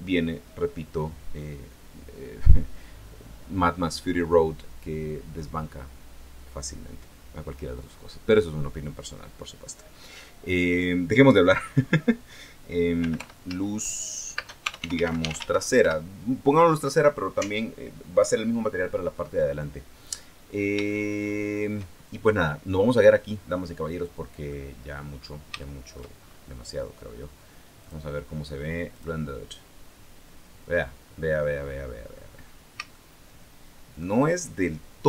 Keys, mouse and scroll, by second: 12.5-15.6 typing, 19.4-19.7 scroll down 2, 19.9-20.3 scroll down 2, 20.6-21.6 shift+middle drag, 22.0-23.9 scroll down 1, 23.9 scroll down 1, 24.3 middle click, 24.9-25.3 scroll down 1, 25.3 shift+scroll up 1, 25.4 shift+middle click, 25.9-26.3 shift+scroll up 1, 27.6 click, 28.7 click, 31.8-32.3 scroll up 1, 32.3 scroll down 1, 32.7-33.7 shift+middle drag, 33.7 shift+scroll up 1.